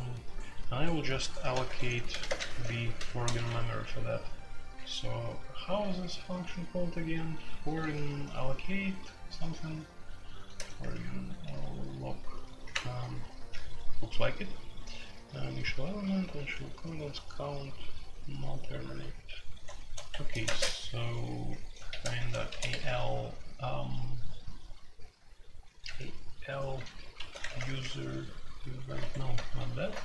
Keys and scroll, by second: 1.5-3.3 typing, 4.7-5.7 typing, 7.7 typing, 10.1-11.4 typing, 12.7 Return, 20.1 Escape, 20.3 typing, 21.9-22.7 typing, 27.0-27.6 typing, 28.8 Return, 28.9 Escape, 29.4 super+j, 29.7 super+k, 29.8-30.0 typing.